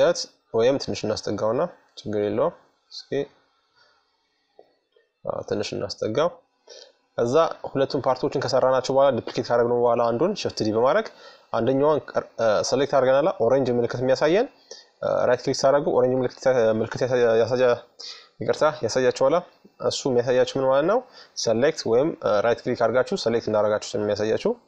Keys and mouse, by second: 0.0-1.7 drag, 1.4-3.8 middle drag, 4.1-6.1 drag, 5.3 middle click, 6.1 middle click, 13.6-16.5 right drag.